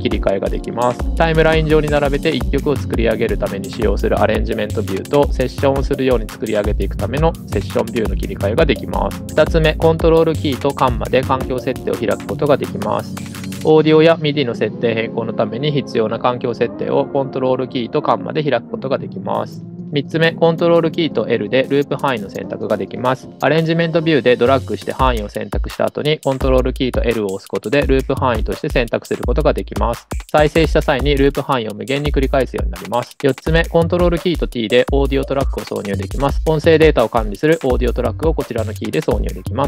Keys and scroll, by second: 1.8 Tab, 2.4 Tab, 3.1 Tab, 3.7 Tab, 9.6 super+,, 11.4 super+,, 18.2 super+,, 23.1 super+i, 27.2 super+i, 34.1 super+t, 34.9 super+t, 35.8 super+t.